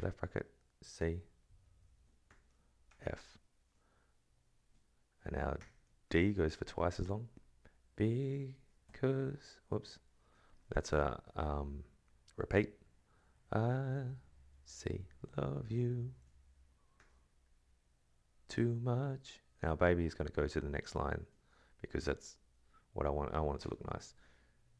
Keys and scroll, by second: 0.8 shift+c, 1.3 alt+Right, 2.0 space, 2.3 ctrl+[, 2.9 shift+f, 4.0 alt+Right, 5.6 ctrl+[, 6.0 shift+d, 7.8 Right, 8.5 ctrl+[, 8.8 Left, 9.5 Right, 9.8 /, 11.9 Left, 12.1 Right, 12.9 alt+Right, 13.9 ctrl+[, 14.5 shift+c, 15.3 alt+Right, 16.9 ctrl+[, 18.3 /, 18.8 alt+Right, 20.0 Right, 20.5 Left, 21.3 BackSpace, 22.2 space, 23.4 BackSpace, 23.6 Return, 24.0 shift+Right.